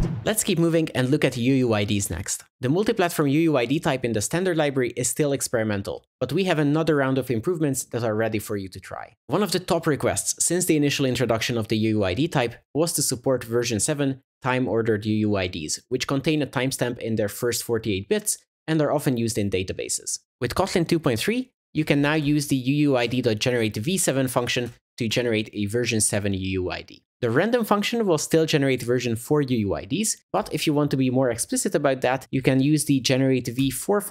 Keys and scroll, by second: 23.1 Return, 25.1 Return, 33.6 Return.